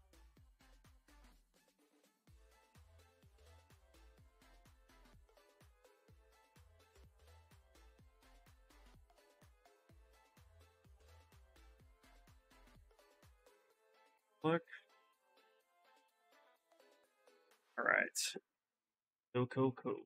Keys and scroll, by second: 6.1 shift+x, 11.1 shift+s, 19.7 shift+s.